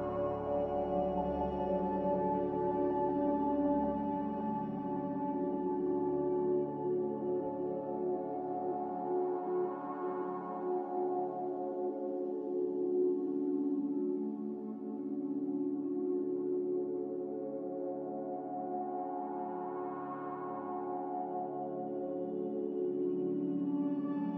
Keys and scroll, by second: 5.6 x, 11.4 s, 13.9-14.8 typing, 15.1 Tab, 17.1-17.8 typing, 19.1-19.9 typing.